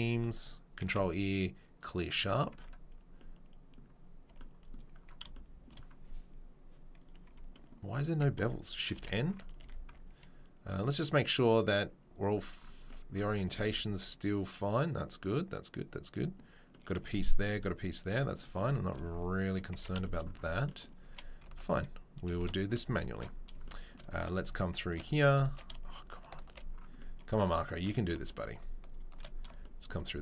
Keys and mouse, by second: 0.8 ctrl+e, 2.5 Tab, 4.2-4.6 shift+drag, 4.6-5.6 middle drag, 7.2 Tab, 8.1 a, 8.4 shift+middle click, 8.9 shift+n, 9.6 Tab, 10.7-21.6 drag, 19.7 Tab, 21.0 Tab, 21.6 alt+middle click, 22.4-26.2 middle drag, 26.5-28.5 middle drag, 29.1 shift+middle click.